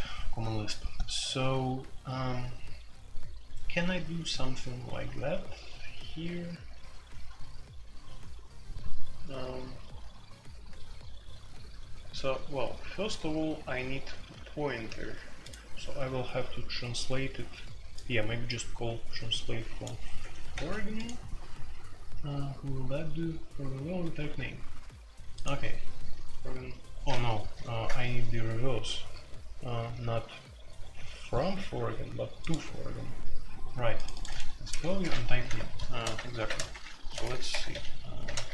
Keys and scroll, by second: 20.5 ctrl+c, 27.6 super+j, 34.8 ctrl+c, 35.3 super+k, 36.3 alt+2, 36.7 shift+Insert, 37.5 Escape, 37.7-38.5 typing.